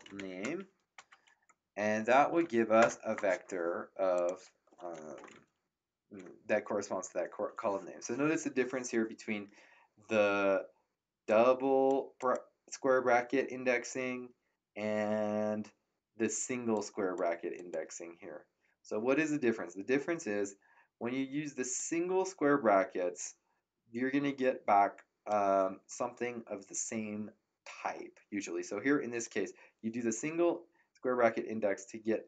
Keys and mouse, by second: 0.0-0.6 typing, 2.8 Return, 4.1 click, 11.2 click, 16.7 click, 21.7 click, 29.2 click.